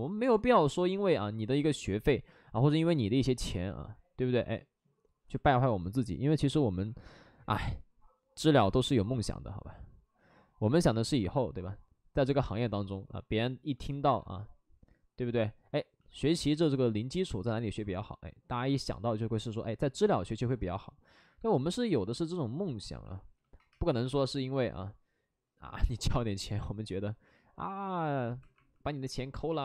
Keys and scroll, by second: 16.1-16.8 typing, 19.0 ctrl+z, 19.7 ctrl+z, 21.4 alt+f, 22.9 alt+f, 23.6 2, 25.6 2, 26.4 w, 28.1-29.5 typing.